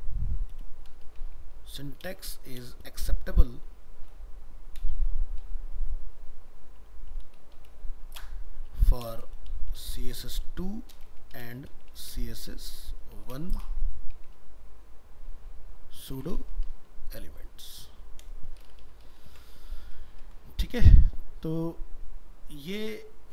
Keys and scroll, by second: 19.3 ctrl+s.